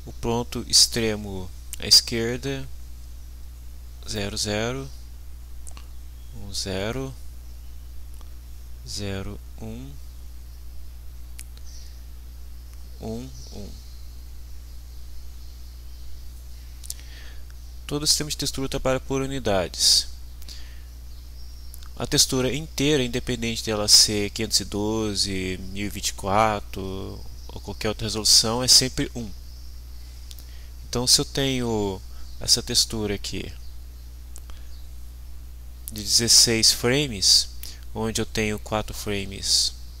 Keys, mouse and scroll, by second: 1.0 click, 2.1 click, 3.0-4.2 drag, 4.4 click, 5.2 click, 5.8 click, 7.0 click, 8.3 click, 9.4-10.6 drag, 12.5-14.1 drag, 15.9-17.4 drag, 18.0 click, 19.8 click, 20.6-22.2 drag, 22.2 click, 23.1 click, 24.0-27.5 drag, 27.6 click, 28.1 click, 29.0 click, 29.4 click, 30.4 click, 31.3 click, 31.8 click, 32.2 click, 33.4 click, 34.8-40.0 drag.